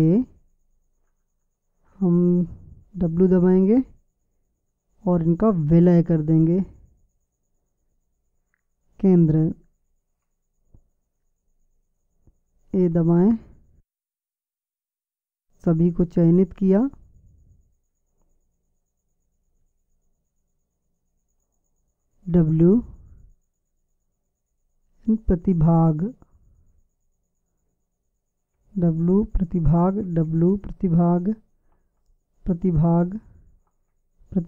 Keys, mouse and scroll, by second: 3.8 w, 13.2 a, 22.7 w, 28.8 w, 30.3 w, 32.1 w, 34.0 w.